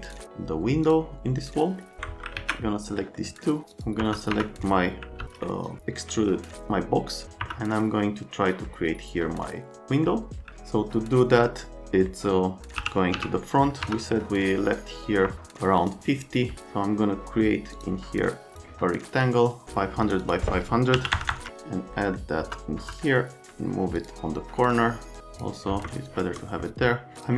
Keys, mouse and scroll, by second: 0.0 click, 0.8 click, 1.4 right click, 2.4 alt+q, 4.0 F3, 4.3 F3, 5.2 alt+x, 7.4 F3, 9.3 middle click, 12.1 middle click, 12.8 l, 13.1 z, 13.8 F3, 15.3 F3, 15.8 click, 16.5 click, 18.5 click, 19.2 click, 20.0 click, 20.2 click, 20.9 KP_5, 21.1 KP_0, 21.3 KP_0, 21.9 right click, 22.4 F3, 22.8 F3, 24.0 click, 25.2 click, 26.1 shift+click, 27.2 click.